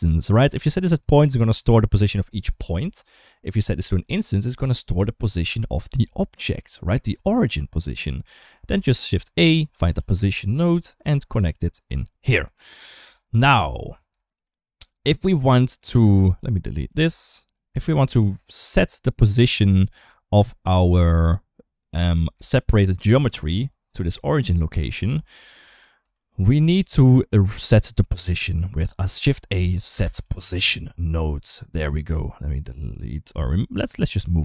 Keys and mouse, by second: 0.3-0.9 drag, 3.0-3.9 drag, 8.5 shift+a, 11.6 click, 13.1 shift+middle click, 14.0 shift+middle click, 15.6 click, 16.7 ctrl+x, 19.1 click, 19.4-22.0 drag, 22.3 ctrl+shift+click, 25.1 shift+middle click, 25.9 shift+middle click, 29.4 shift+a, 31.9 click, 32.3 click, 32.6 click, 33.1 g.